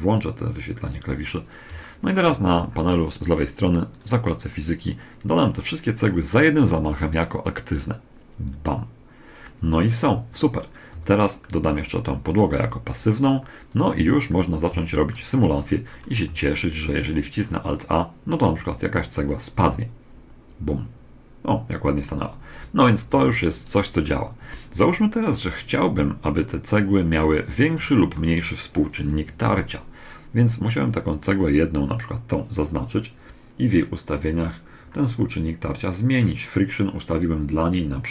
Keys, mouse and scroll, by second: 1.6-3.1 middle drag, 2.3 t, 3.7 click, 8.2 click, 10.7 a, 11.1 scroll up 1, 11.3 middle click, 12.1 right click, 12.9-14.5 drag, 13.2 right click, 13.8 z, 14.5-15.9 middle drag, 14.5 z, 16.0 alt+a, 16.4 middle click, 22.9 Escape, 23.8-25.0 middle drag, 26.1 middle click, 27.6-28.7 middle drag, 28.7 KP_1, 29.3 middle click, 31.0 right click, 33.7 click, 37.2 click.